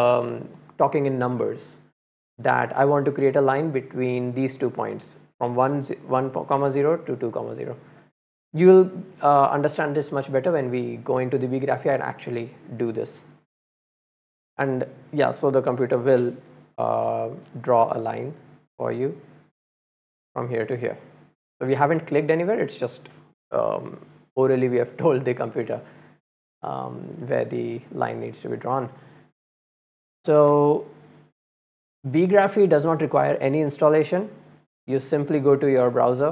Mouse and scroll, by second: 2.8-4.2 scroll up 1, 12.7 click, 13.9 click, 14.5 click, 16.2 click, 17.4 click, 17.6 click, 19.0 click, 20.0 click, 28.7 click, 36.1 click.